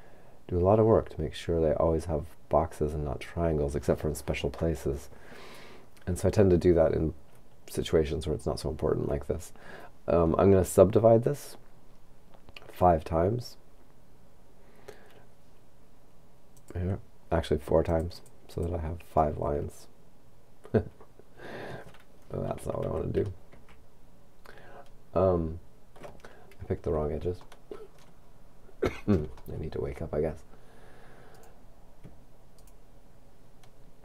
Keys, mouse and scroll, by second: 11.7-13.0 scroll down 2, 13.6-15.0 scroll up 2, 16.6 click, 17.9 click, 22.7 ctrl+z, 27.5 shift+middle click, 28.3-29.4 shift+scroll up 4, 29.4 shift+middle click, 31.3 right click, 32.6 shift+right click.